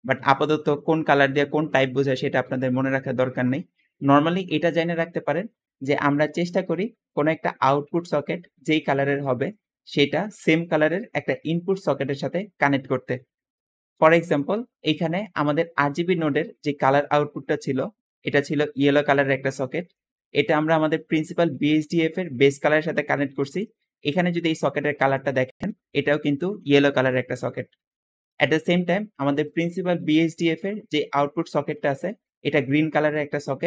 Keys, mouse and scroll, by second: 6.8 `, 6.9-9.4 drag, 10.2-12.5 drag, 14.2 Escape, 28.1 Escape, 29.1 Escape, 29.4-30.9 drag, 31.5 click, 32.1 click.